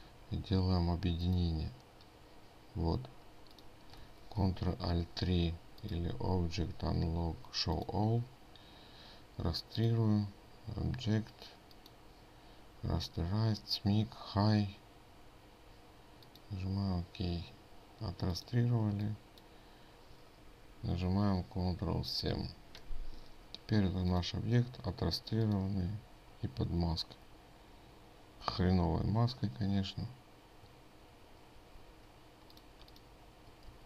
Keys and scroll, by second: 5.0 ctrl+alt+3, 22.9 ctrl+7, 32.1 ctrl+z.